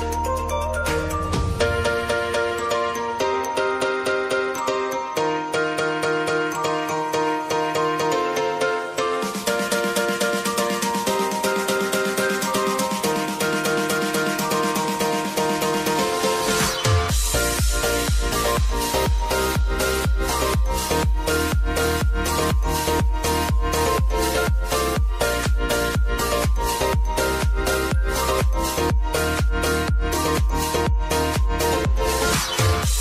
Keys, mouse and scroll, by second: 2.9 u, 5.9 click, 6.6 F4, 7.5 click, 12.6 ctrl+d, 14.7 click, 19.3 alt+scroll up 1, 22.2-24.8 drag, 28.0 ctrl+a, 29.5-31.7 typing.